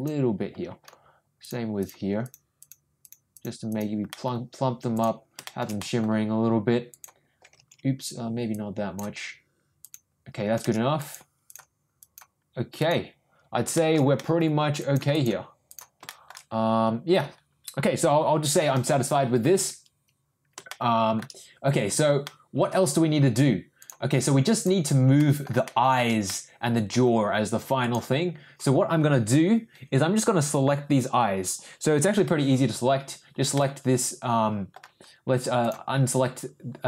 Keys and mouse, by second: 1.4 click, 1.8 click, 2.2 click, 2.5 click, 3.0 click, 3.3 click, 3.7 click, 4.1 middle click, 4.9 click, 5.4 shift+middle click, 5.8 middle click, 6.9 click, 8.5 ctrl+click, 9.8 ctrl+click, 10.9 ctrl+click, 11.4 ctrl+click, 12.0 click, 12.7 click, 13.7 shift+middle click, 14.1 middle click, 14.8 click, 15.1 click, 15.6 click, 16.0 shift+middle click, 20.7 shift+middle click, 21.8 Tab, 22.2 middle click, 22.8 Tab, 23.8 click, 25.2 middle click, 25.6 middle click, 26.2 middle click, 27.8 click, 33.5-34.7 middle drag, 35.6 click.